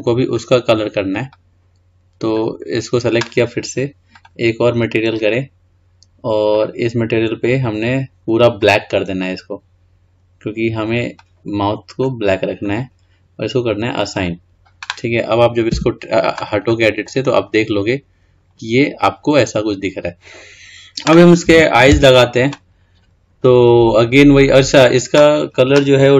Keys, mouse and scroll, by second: 4.3-8.9 drag, 14.3-15.9 drag, 15.9 Tab, 16.9 middle click, 17.5-18.5 scroll down 2, 18.5-19.4 scroll up 2, 19.4-20.0 scroll down 2, 20.0 click, 22.1 Tab, 22.9-23.9 scroll down 2, 23.9-24.6 scroll up 2, 24.6 click.